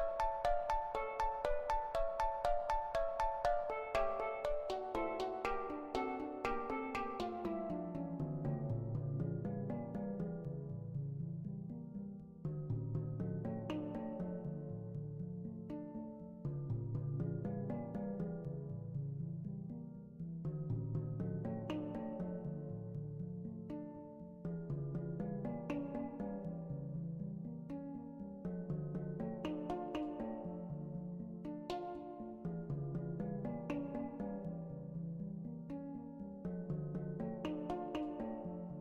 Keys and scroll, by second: 0.7-2.4 typing, 12.7-13.6 typing, 20.3 ctrl+z, 30.2 1, 30.8 2, 37.1-38.1 typing.